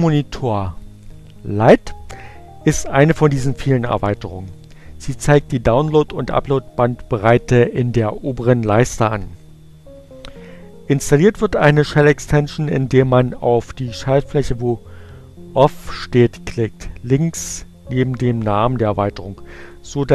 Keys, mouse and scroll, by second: 0.9 click, 18.2 click.